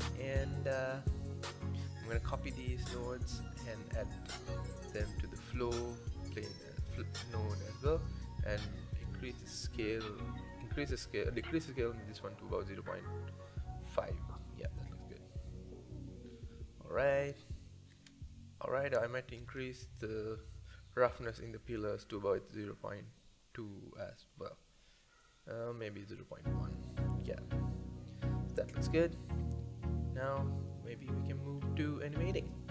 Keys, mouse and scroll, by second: 1.6 ctrl+c, 2.7 click, 3.5 ctrl+v, 4.7-5.1 drag, 7.5-8.0 scroll up 4, 8.0 click, 8.9 KP_Decimal, 10.3-12.4 drag, 17.1 click, 19.6-21.8 drag, 23.4 click, 25.8-27.7 drag.